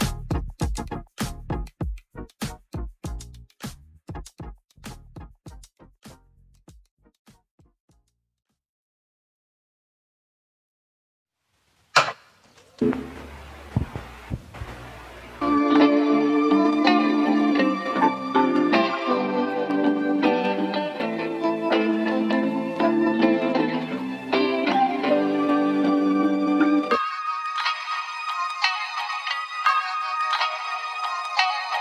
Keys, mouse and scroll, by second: 2.0-2.5 scroll down 7, 2.5-5.0 scroll up 11, 5.0-30.7 drag.